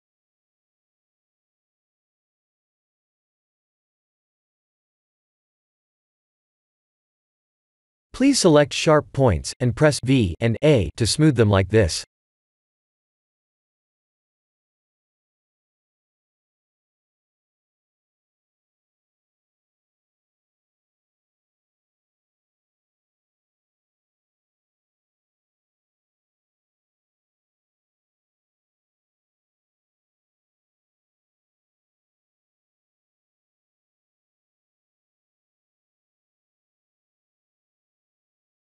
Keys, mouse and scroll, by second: 0.1 click, 2.5 shift+middle click, 3.4-5.7 shift+middle click, 6.0-6.7 scroll up 6, 6.8 shift+middle click, 7.6 shift+middle click, 8.2 Tab, 8.7 click, 9.1 v, 10.3 click, 10.5 v, 11.1 shift+middle click, 11.3 shift+middle click, 12.2 click, 12.4 v, 13.5 click, 13.6 v, 14.1 shift+middle click, 15.3 click, 15.7 shift+middle click, 15.8 shift+middle click, 16.5 shift+click, 17.0-17.6 scroll down 4, 18.8 v, 19.6 Tab, 21.2 shift+middle click, 22.6 Tab, 24.0 click, 24.6 v, 25.7 click, 26.1 v, 26.9 click, 27.1 v, 27.8 Tab, 29.0 shift+middle click, 29.4 shift+middle click, 29.8 shift+middle click, 31.7 Tab, 32.9 shift+middle click, 33.7-34.2 scroll up 6, 34.3 Tab, 35.1 Tab, 35.6 click, 36.2 shift+click, 37.1 shift+middle click, 38.0 shift+click.